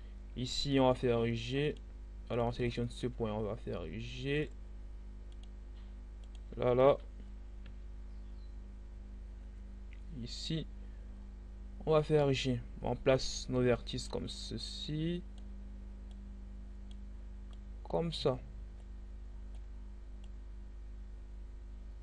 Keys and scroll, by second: 0.5 g, 7.3 e.